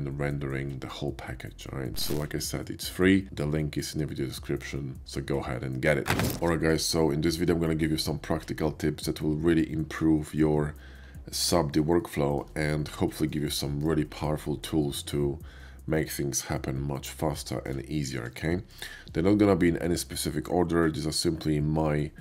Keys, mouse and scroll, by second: 0.1 ctrl+b, 0.2 Tab, 0.8 click, 6.4-6.7 shift+middle drag, 12.0-12.3 middle drag, 12.7 shift+middle click, 13.5-13.8 shift+middle drag, 17.3 shift+middle click, 18.0 shift+middle click, 18.3 shift+middle drag.